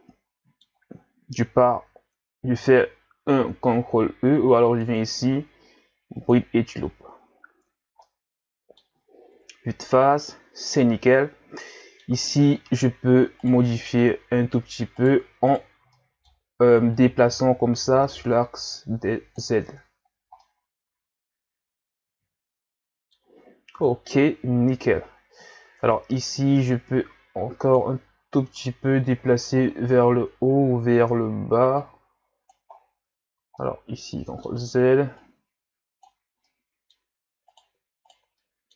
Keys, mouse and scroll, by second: 4.7-7.4 drag, 7.4-7.7 scroll down 3, 7.7 Tab, 8.0-9.4 middle drag, 9.4 KP_1, 11.2-11.6 scroll down 1, 11.6-12.2 middle drag, 12.2-12.6 scroll up 4, 12.6 Tab, 13.5 right click, 13.7-15.0 middle drag, 15.0 shift+right click, 15.5 shift+right click, 16.0-17.0 middle drag, 17.0-19.6 drag, 19.6 Tab, 20.1 scroll down 2, 20.4-23.5 middle drag, 23.8 KP_1, 24.7-25.2 scroll down 1, 25.3-25.8 scroll up 2, 25.8 Tab, 26.7-28.5 drag, 28.5 ctrl+z, 29.6-29.9 scroll up 4, 29.9 Tab, 30.7-31.0 scroll up 2, 31.0 Tab, 31.8 click, 32.8-33.1 scroll down 4, 33.2 ctrl+z, 33.6-35.2 middle drag, 35.2 click, 36.5-37.5 middle drag, 37.5 right click, 38.4 middle click.